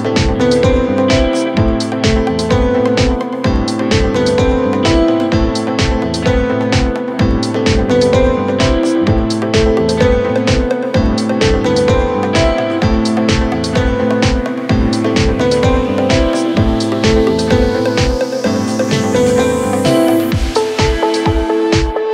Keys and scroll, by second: 1.7 3, 2.1 4, 2.8 3, 7.1 ctrl+z, 7.7 4, 12.9 p, 15.2 7, 21.1 ctrl+].